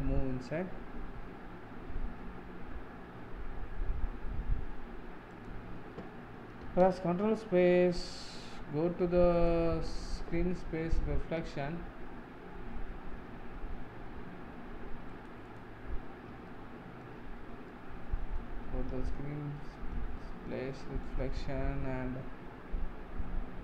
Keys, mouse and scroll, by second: 6.7 ctrl+space, 15.5 click, 16.1-16.5 scroll up 3, 16.5-18.5 shift+middle drag, 18.5-19.1 scroll up 5, 19.1-20.4 shift+middle drag.